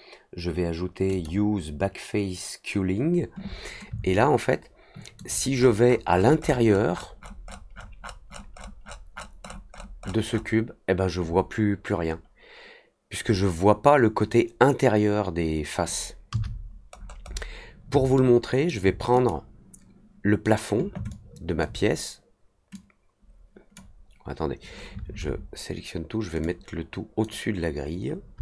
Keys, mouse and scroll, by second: 1.0 click, 4.1-5.1 alt+drag, 5.5 middle click, 5.5-8.3 scroll up 18, 5.8 middle click, 6.1 middle click, 6.3 middle click, 8.3 middle click, 8.5 middle click, 8.8 middle click, 9.1-10.4 scroll up 5, 16.9 middle click, 18.1-18.6 alt+middle drag, 19.1 click, 21.0 alt+click, 22.7-23.7 drag, 26.4 click.